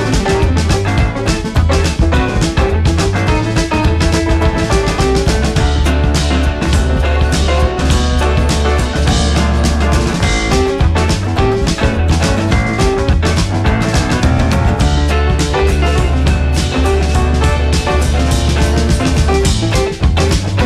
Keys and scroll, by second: 6.2 ctrl+c, 6.3 ctrl+v, 9.8 Right, 9.9 Up, 10.0 Right, 10.1 Up, 10.2 Right, 10.5 Up, 10.6 Right, 10.7 Up, 10.8 Right, 10.8 Up, 10.9 Right, 11.0 Up, 11.1 Right, 11.2 Down, 11.5 Up, 11.6 Right.